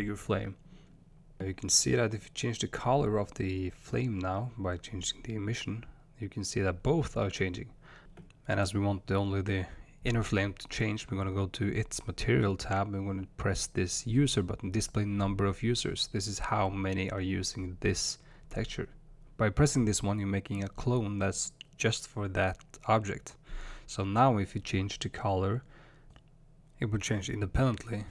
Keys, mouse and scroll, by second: 1.7 click, 3.3 drag, 4.7 drag, 7.3 click, 10.9 click, 17.9-19.3 drag, 24.1 click.